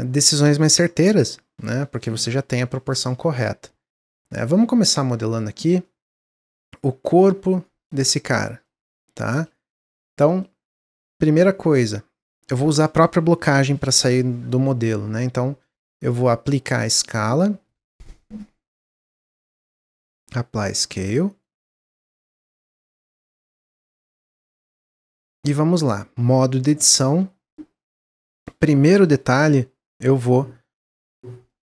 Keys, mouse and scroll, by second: 3.9-5.3 middle drag, 5.3 click, 5.8-12.8 middle drag, 16.4-21.4 drag, 22.2-26.0 middle drag, 26.0 Tab, 26.7-29.7 middle drag, 30.8-31.6 middle drag.